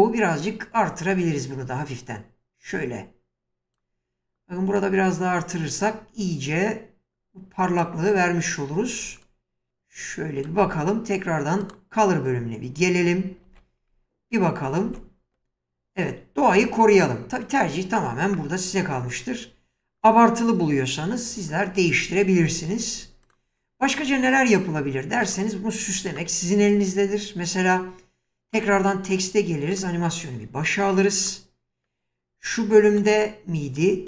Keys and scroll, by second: 13.4 ctrl+f, 14.9 space, 22.1 space.